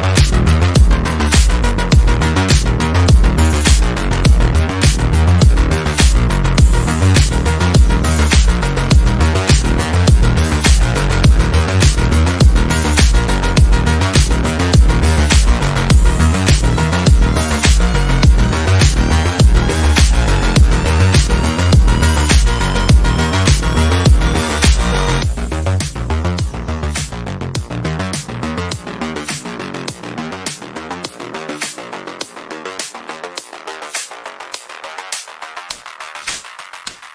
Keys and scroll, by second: 21.6 shift+Page_Down.